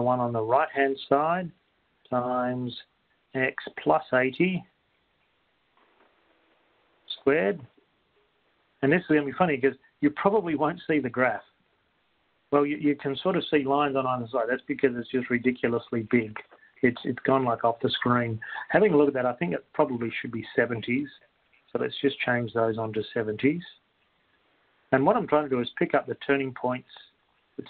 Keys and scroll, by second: 2.7 *, 3.9-5.1 typing, 6.7 0, 7.7 ), 8.7 Return, 8.8-9.5 typing, 24.1 Right, 24.7 7, 27.1 Right.